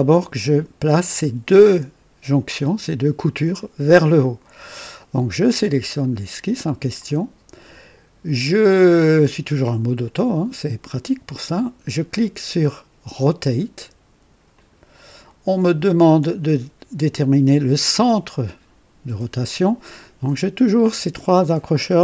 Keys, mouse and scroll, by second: 5.9 click, 14.4 click.